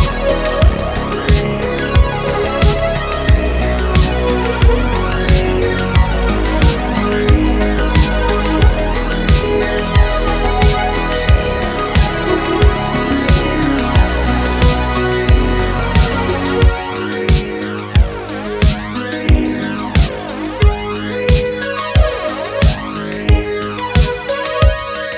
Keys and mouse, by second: 0.2 click, 2.3 click, 3.0-4.5 drag, 5.5 click, 6.6-8.6 drag, 9.3-10.3 drag, 10.8-13.5 drag, 14.5-15.7 drag, 20.5-21.6 middle drag, 23.9 middle click.